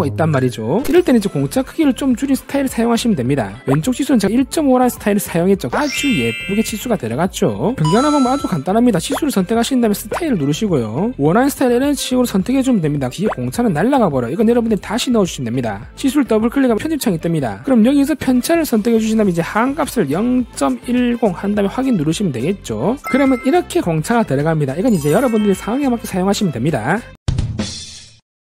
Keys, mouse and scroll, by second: 9.8 click, 10.7 click, 13.1 click, 18.5 click, 19.6 click, 21.2 1, 22.6 click.